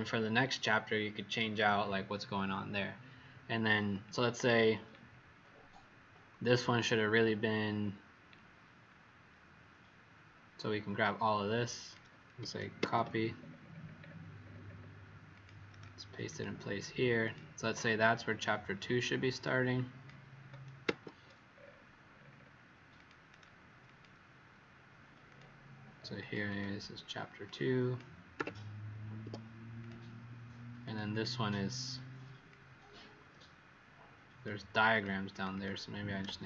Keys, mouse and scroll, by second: 4.5 alt+scroll down 1, 8.8-9.1 alt+scroll up 1, 11.0 click, 12.8 ctrl+c, 13.3-14.8 scroll down 10, 15.3 click, 15.3 scroll down 1, 17.2 click, 17.6-19.4 scroll up 13, 19.4 click, 20.8 ctrl+c, 21.4-22.4 scroll down 10, 22.9 click, 22.9-23.2 scroll down 2, 25.2 click, 26.4 click, 27.4 click, 28.3 2, 29.2 Escape, 29.7 click, 30.8 click, 31.0 click, 32.5 click, 35.3 click, 35.5 click.